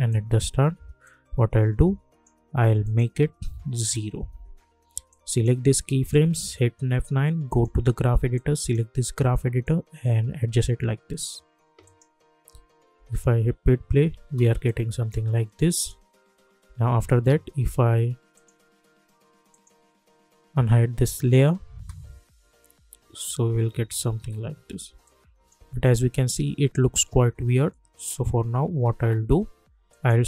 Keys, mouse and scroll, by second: 3.9 Return, 5.1 click, 6.3 F9, 7.4-11.1 drag, 12.5 u, 12.9 space, 14.6 click, 16.3 u, 20.2 click, 21.7 space, 25.0 click, 25.6 space, 29.9 click.